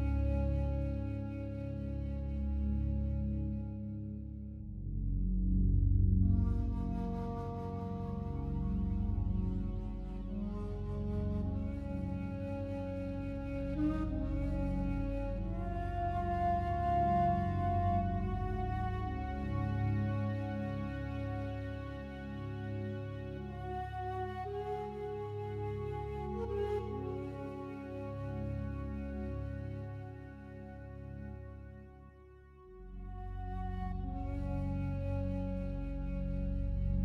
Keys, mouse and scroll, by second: 2.1 alt+click, 2.7-3.4 ctrl+alt+drag, 5.2 click, 6.2-8.1 drag, 8.2-11.8 typing, 12.6 ctrl+alt+middle click, 13.0 ctrl+alt+click, 13.1-13.7 typing, 13.4 alt+shift+click, 13.7 alt+shift+Return, 15.6-16.6 drag, 17.1 alt+click, 17.6 alt+middle click, 17.6 typing, 18.0-19.9 alt+drag, 19.9 middle click, 20.2-21.1 drag, 23.3-26.0 alt+shift+drag, 23.3-24.9 alt+shift+middle drag, 26.7 click, 27.5 click, 28.2-32.8 alt+shift+drag, 34.1 click, 35.2-37.0 drag.